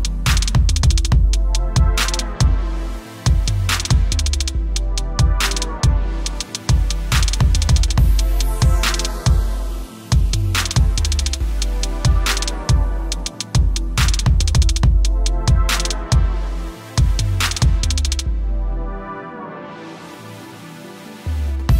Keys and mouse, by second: 0.3 alt+shift+click, 1.7 click, 4.0 click, 4.5 shift+click, 5.2 alt+shift+click, 5.7 alt+shift+click, 6.6 click, 7.2 Return, 7.6 click, 7.7 b, 10.0 click, 11.1 click, 13.3 click, 15.4 click.